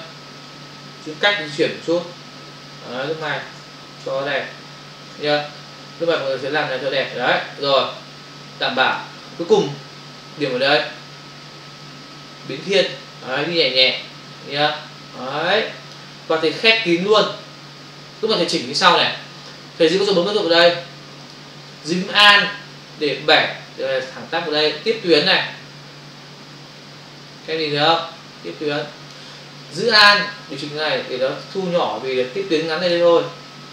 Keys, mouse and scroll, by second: 11.8 click, 21.3 ctrl+click, 23.3 alt+click, 30.6 alt+click.